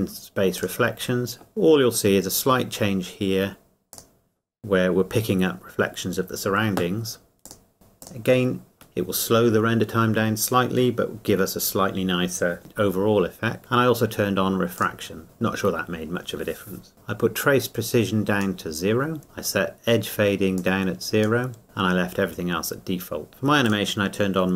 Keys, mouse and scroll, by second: 3.9 click, 7.4 click, 14.7 click, 17.9 click, 20.5 click, 23.7 click.